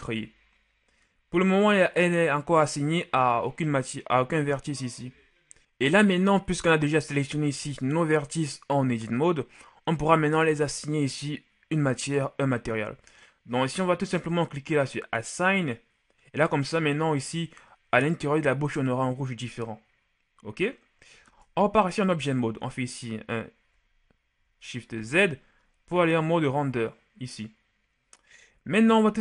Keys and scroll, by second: 21.6 Tab, 25.2 shift+z.